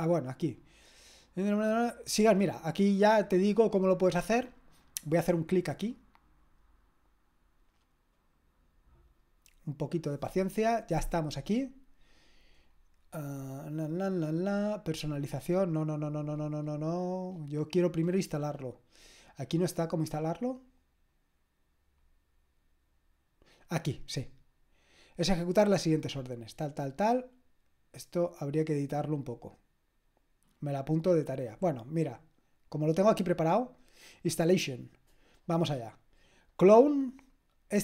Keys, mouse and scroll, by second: 5.3 click, 20.1 scroll up 1, 20.2-22.9 scroll down 1, 22.9-25.8 scroll down 1, 25.8-35.0 drag, 36.8 click.